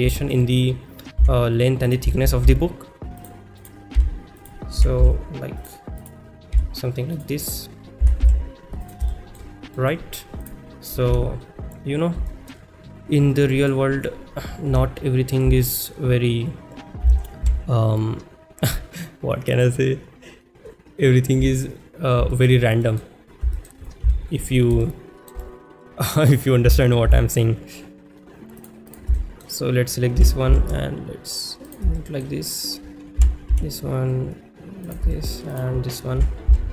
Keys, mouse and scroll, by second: 0.2 shift+middle drag, 1.9 click, 1.9 s, 3.6 click, 3.6-5.1 typing, 4.4 click, 5.6 click, 6.6 s, 7.2 click, 8.8 click, 9.2 shift+middle drag, 9.9 middle click, 10.4 click, 11.1 KP_1, 12.3 shift+middle click, 13.3-13.7 middle drag, 14.7 KP_1, 15.3 shift+middle click, 17.0 g, 17.6 z, 19.5 click, 21.6 shift+middle click, 22.4 shift+middle click, 22.9 middle click, 24.1 KP_1, 24.9 shift+middle click, 28.0 g, 28.0 z, 28.6 click, 29.2 shift+middle click, 31.5 g, 31.5 z, 31.7 click, 32.0 shift+middle click, 32.4 click, 34.9 click, 35.1 shift+middle click, 35.5 click.